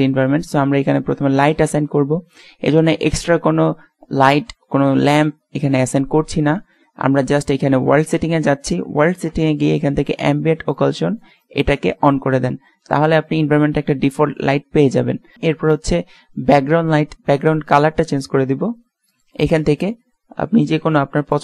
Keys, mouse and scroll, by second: 1.7 click, 13.5-15.3 drag, 15.8-17.4 drag.